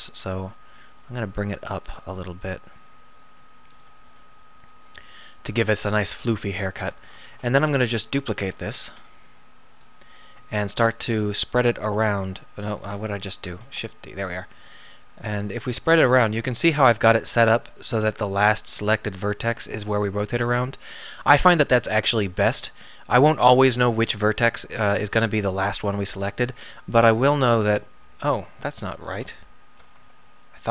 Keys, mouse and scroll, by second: 0.2 g, 2.1 g, 4.1 g, 7.1 a, 7.3 a, 8.9 KP_7, 11.5 shift+r, 13.1 ctrl+z, 13.6 shift+d, 15.0 r, 22.6 g, 25.6 g, 26.5 r, 29.8 ..